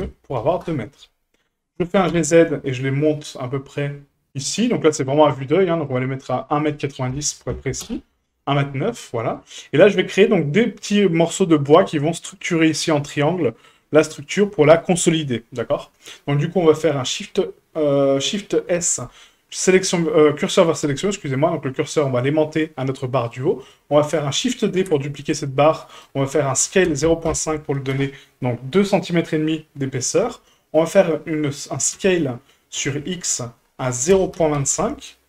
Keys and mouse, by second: 1.8 g, 6.6-8.6 drag, 9.1 shift+middle drag, 18.7 shift+s, 23.2 shift+middle click, 24.8 shift+d, 26.6 s, 31.9 s.